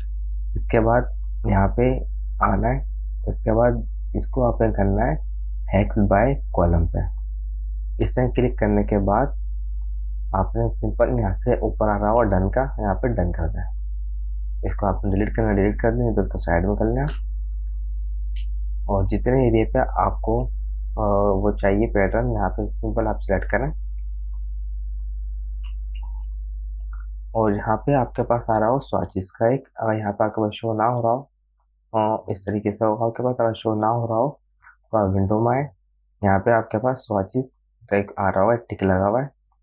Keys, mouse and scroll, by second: 2.9 click, 7.1 click, 13.5 click, 15.1 space, 15.4 click, 15.6 space, 16.2-17.6 drag, 17.6 space, 17.7 click, 18.0 space, 19.8 right click, 20.4 click, 22.8-27.0 drag, 31.6 v, 31.7 click, 35.1 click.